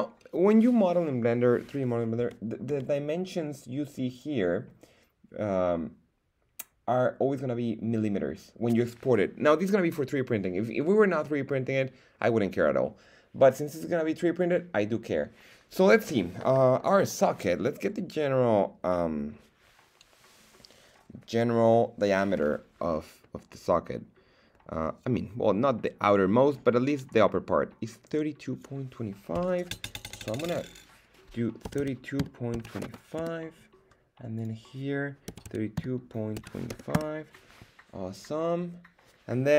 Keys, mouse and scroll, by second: 2.2 n, 2.6 n, 4.1 click, 30.3-33.9 drag, 34.3-38.2 drag, 38.3 scroll down 1, 38.9-39.5 scroll down 3.